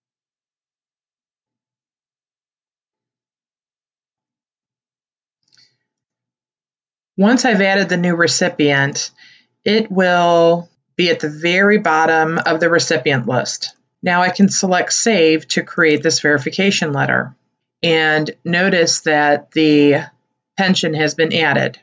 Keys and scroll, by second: 1.1 8, 1.4 9, 2.7 8.